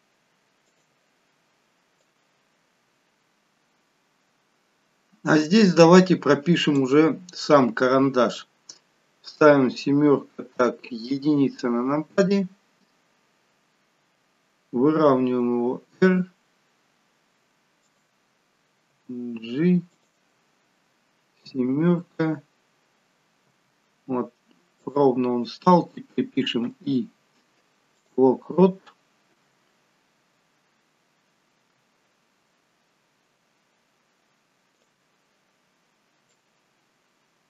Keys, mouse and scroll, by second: 0.9 typing, 2.3 click, 7.7 scroll down 2, 9.4 KP_7, 11.1 KP_1, 15.0 r, 18.9 g, 21.5 KP_7, 23.5 g, 26.6 i, 31.5 r, 36.4 click.